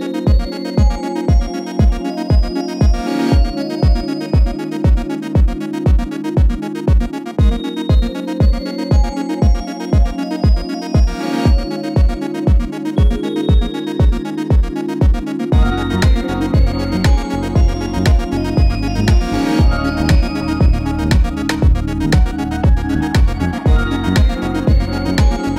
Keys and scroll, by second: 6.6 typing, 9.7 typing, 13.3-14.1 typing, 15.9 typing, 17.1 super+c, 17.3 super+v, 17.6 Left.